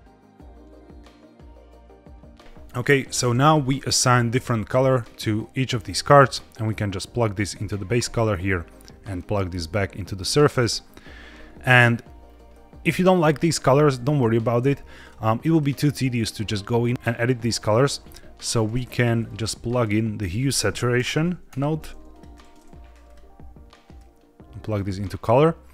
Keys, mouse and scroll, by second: 1.0 click, 2.6 click, 2.8 click, 4.3-4.8 scroll down 2, 5.2 click, 5.8-6.4 scroll down 2, 6.5-7.4 drag, 8.4-9.5 drag, 10.1 scroll down 2, 10.4 middle click, 11.8-12.4 scroll up 2, 12.4-13.1 middle drag, 14.1-14.4 drag, 14.5 g, 15.3 click, 15.9 click, 16.9 click, 17.6 click, 17.9 g, 19.1-22.1 drag, 23.0-24.6 drag.